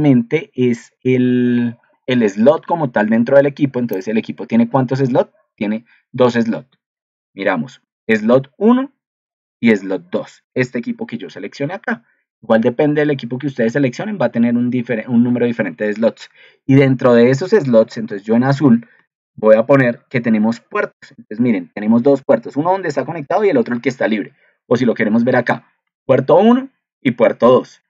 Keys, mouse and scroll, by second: 7.1 ctrl+2.